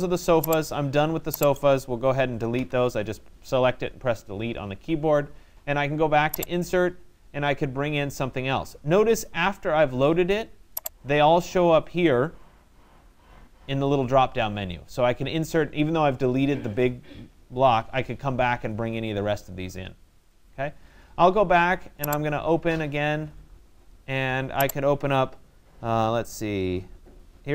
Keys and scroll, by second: 2.1 Delete.